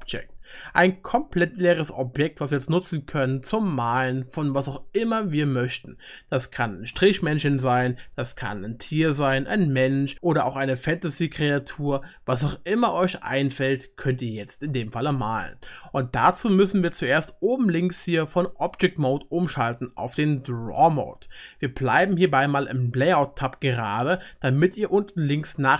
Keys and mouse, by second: 13.1-20.2 middle drag, 19.1-20.2 drag, 23.8-25.7 drag, 23.8-25.7 middle drag, 23.8-25.7 right drag.